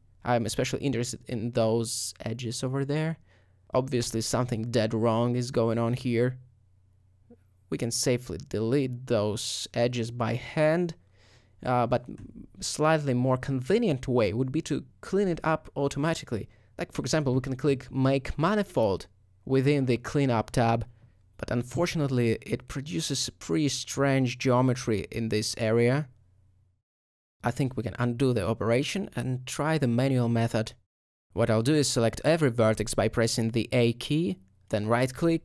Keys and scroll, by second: 4.2 alt+g, 5.3 alt+g, 8.7 alt+g, 9.6 x, 27.4 ctrl+alt+a, 27.6 ctrl+z.